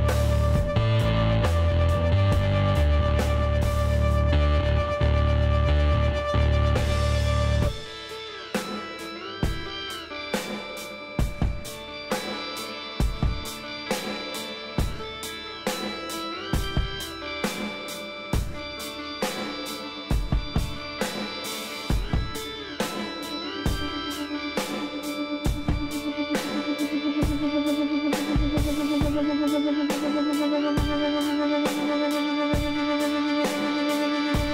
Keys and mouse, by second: 0.8 e, 2.6-4.3 drag, 5.0 a, 5.4 a, 6.3 s, 10.7-11.9 drag, 11.9 Tab, 14.7 Tab, 15.3 click, 15.5 middle click, 16.6 middle click, 17.6 z, 18.3 ctrl+z, 19.2 z, 20.3 middle click, 21.3 KP_5, 26.9 KP_5, 27.6-32.1 drag, 29.7 s, 32.5 click, 33.3 KP_1, 33.7 z, 34.2 z.